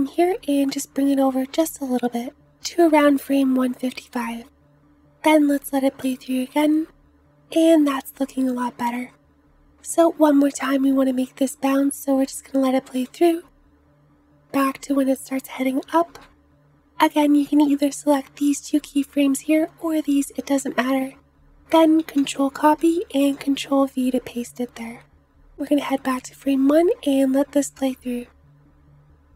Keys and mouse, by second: 4.1 space, 7.4 space, 11.2 space, 12.2 space, 13.0 Left, 13.2 Left, 13.2 Left, 13.3 Left, 13.5 Left, 13.6-14.1 Left, 14.5 Left, 15.1 Left, 15.9 Right, 16.4 Right, 16.8 Right, 22.1 ctrl+c, 22.7 ctrl+v, 25.9 space.